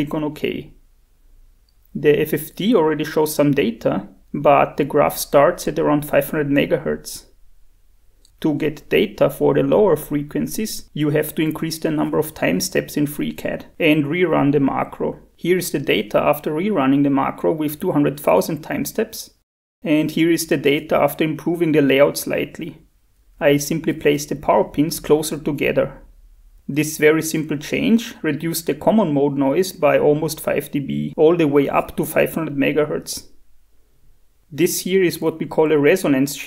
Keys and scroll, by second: 2.3 shift+F5, 2.3 shift+F4, 5.2 shift+F5, 15.0 shift+F4.